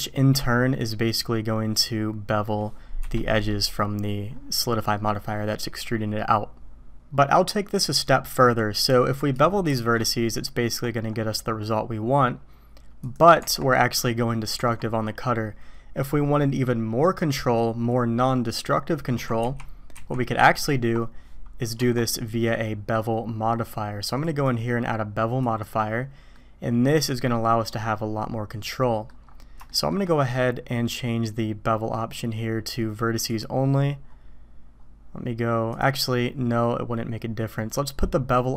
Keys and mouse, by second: 3.3 click, 5.0-5.5 drag, 8.4-8.7 drag, 9.7 ctrl+shift+b, 13.4 Tab, 14.6 Tab, 19.4 ctrl+z, 19.9 ctrl+z, 20.4 ctrl+z, 21.8 Tab, 24.2-25.6 drag, 26.3-27.6 middle drag, 27.6-29.1 drag, 29.6 shift+drag, 33.1 click, 37.7-38.5 drag.